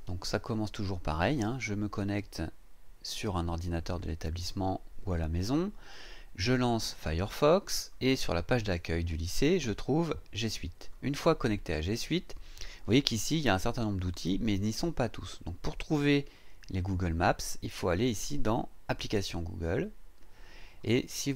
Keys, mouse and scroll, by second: 11.8 click, 19.6 click.